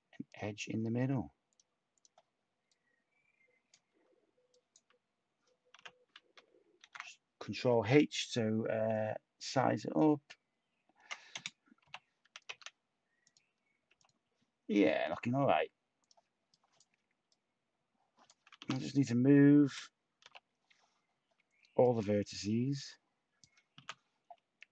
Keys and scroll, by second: 0.6 x, 5.7 u, 6.8 shift+h, 11.8 /, 12.4 Tab, 13.8 Tab, 18.6 t, 19.6 /, 23.8 t.